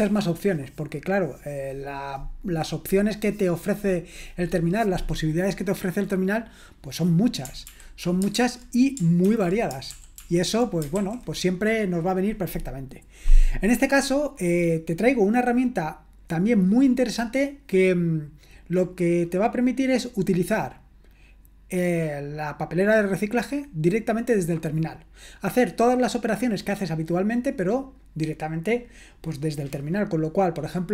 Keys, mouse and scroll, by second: 7.7 ctrl+l, 8.4 super+l, 9.2 ctrl+l, 10.0 super+l, 11.0 super+l.